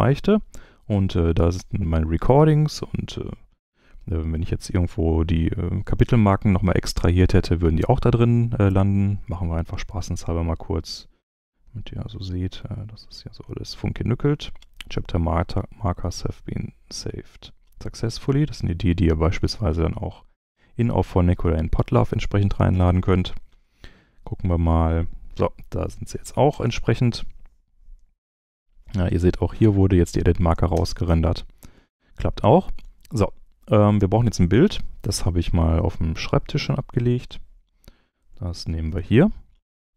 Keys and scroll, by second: 26.5 space, 28.2 space, 30.7 space, 38.5 super+c.